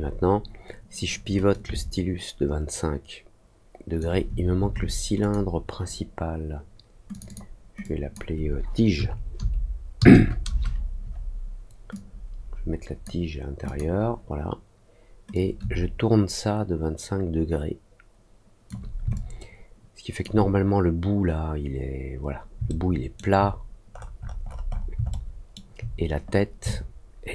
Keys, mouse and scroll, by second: 1.4-3.9 shift+drag, 5.1 click, 7.0 click, 7.2 click, 7.8 click, 11.9-13.0 drag, 13.6 click, 15.3-18.6 shift+drag, 19.1-20.1 alt+drag, 22.6 alt+middle click, 23.9 middle click, 24.7 scroll up 1, 25.0 alt+middle click, 26.6-27.3 alt+drag.